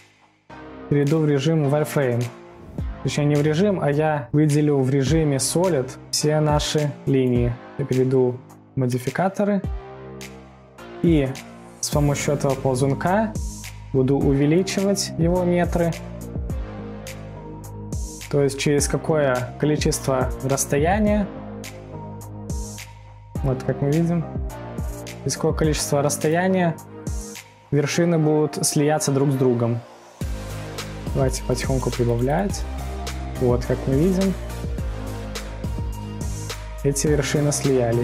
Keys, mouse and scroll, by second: 7.6-9.2 middle drag, 9.2 click, 9.8-10.2 scroll down 3, 10.2 scroll up 3, 10.5-13.5 middle drag, 14.9-18.0 drag, 27.0-27.3 scroll up 2, 29.3 scroll up 4, 29.3-29.9 scroll down 1, 29.9-30.7 scroll up 1, 31.5-34.2 drag, 34.2 scroll up 1, 35.5-35.8 scroll up 4, 35.8-38.0 drag.